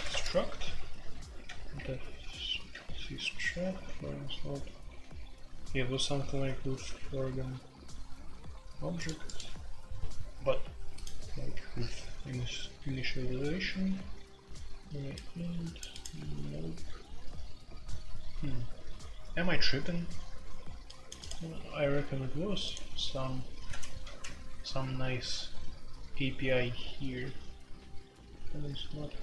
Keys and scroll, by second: 0.0-0.1 typing, 0.6 F3, 1.4 F3, 1.7 F3, 2.7 F3, 24.0 ctrl+w.